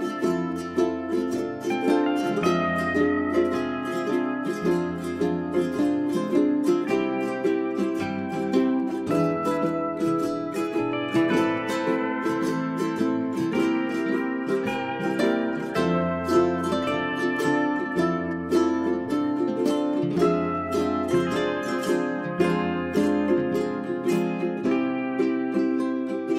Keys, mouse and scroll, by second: 2.2 ctrl+a, 2.6-5.5 drag, 5.5 space, 5.8 click, 6.2 right click, 6.4-9.0 drag, 9.0 space, 9.5 1, 9.9 click, 13.2-13.6 scroll down 1, 13.6 scroll up 1, 13.9 click, 15.6 scroll down 1, 15.9 click, 16.3 middle click, 18.4 scroll down 1, 18.9-20.4 scroll up 1, 20.7 click, 21.0 click, 21.6 1, 22.0 click, 23.8 ctrl+click, 24.4 1.